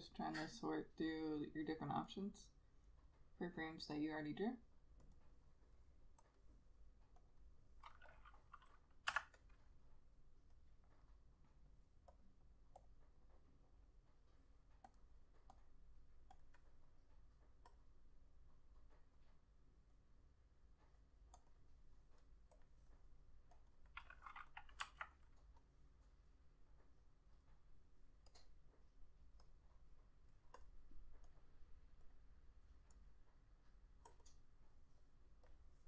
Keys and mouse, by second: 5.3 double click, 12.8 F6, 21.6 double click, 25.0 F6, 34.3 double click.